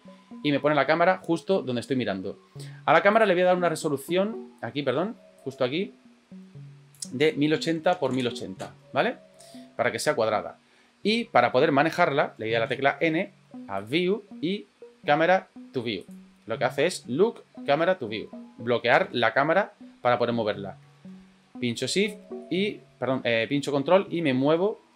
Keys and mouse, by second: 3.1 click, 5.4 click, 7.0-9.4 drag, 8.1 KP_0, 12.6 n, 16.0 click, 19.0 n, 22.4 shift+middle click, 23.4-24.9 ctrl+middle drag.